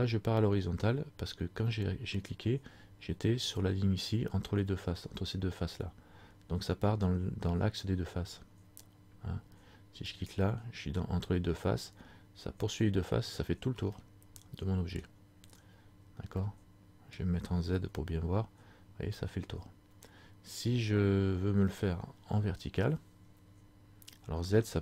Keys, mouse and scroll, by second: 10.3 alt+right click, 14.1 scroll up 1, 14.2 middle click, 15.4-16.5 scroll down 4, 16.5 middle click, 18.1 z, 22.1-23.0 scroll up 4, 23.3-24.5 scroll down 1, 24.5 z.